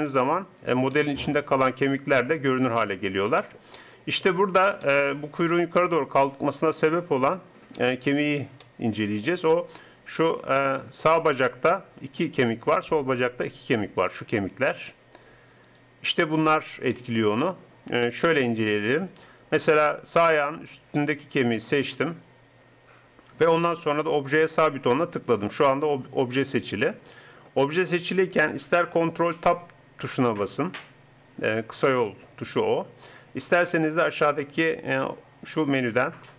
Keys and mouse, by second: 1.0 middle click, 2.0 middle click, 8.6 middle click, 19.1-20.8 middle drag, 21.8-27.8 drag, 34.4-36.1 drag.